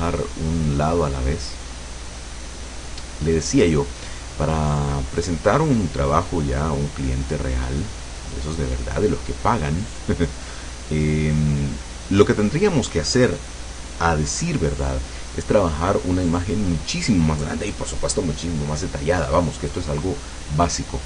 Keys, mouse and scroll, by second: 5.1-6.3 drag, 6.9-10.8 drag, 11.4 click.